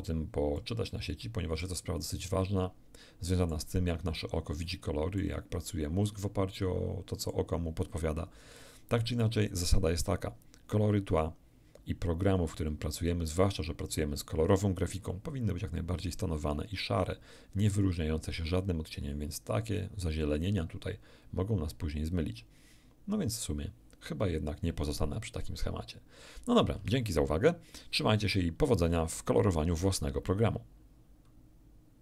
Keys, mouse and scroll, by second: 0.5-1.8 middle drag, 2.2-3.7 ctrl+middle drag, 4.7 ctrl+middle click, 5.7-7.5 ctrl+middle drag.